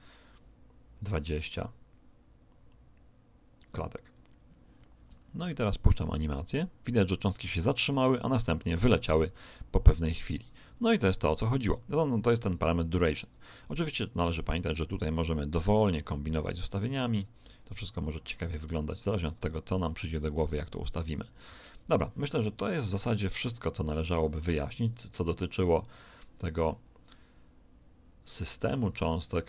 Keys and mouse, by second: 5.4 alt+a, 10.6 Escape, 11.5 alt+a, 13.4 Escape, 13.9 right click, 14.3 s, 15.6 alt+a, 15.8 middle click, 19.0 Escape, 19.7 right click, 20.1 r, 21.4 s, 23.1 right click.